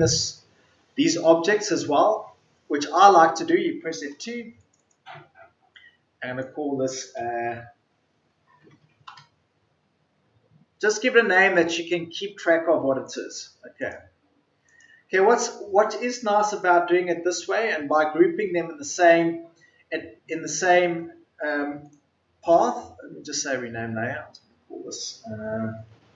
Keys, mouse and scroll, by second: 4.0 F2, 9.0 Return.